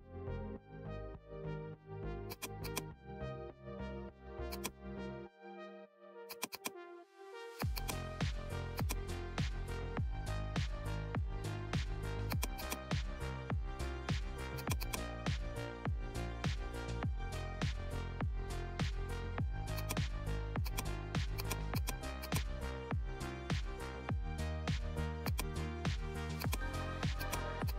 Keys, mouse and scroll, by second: 23.8 right click, 23.8 right click, 25.2-27.7 drag.